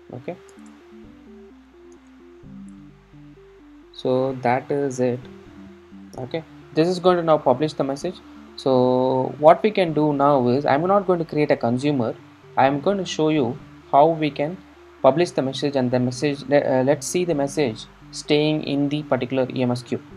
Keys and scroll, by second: 6.0 super+s.